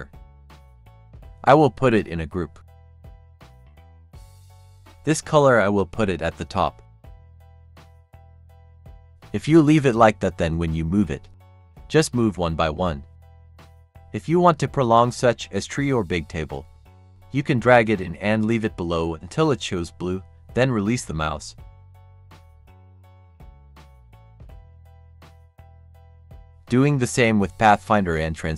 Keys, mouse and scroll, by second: 4.0-28.5 drag.